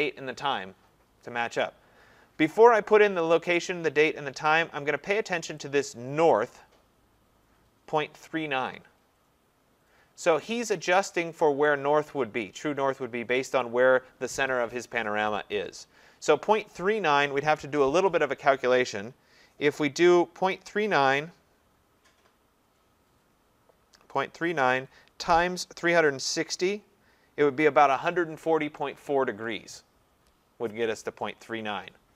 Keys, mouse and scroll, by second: 6.5 click, 10.7 click, 13.6 click.